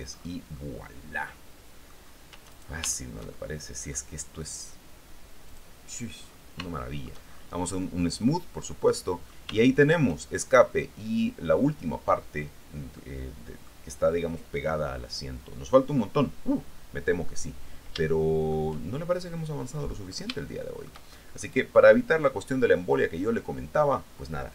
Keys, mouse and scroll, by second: 0.7-2.7 middle drag, 2.7 shift+right click, 3.0-4.3 shift+middle drag, 5.9 click, 6.4-7.1 scroll up 3, 6.9 shift+middle click, 8.9 click, 9.7 shift+click, 10.3 shift+middle click, 13.1 middle click, 18.2 shift+middle click, 20.4 shift+scroll up 1, 20.6 shift+middle click, 21.6-24.5 shift+middle drag.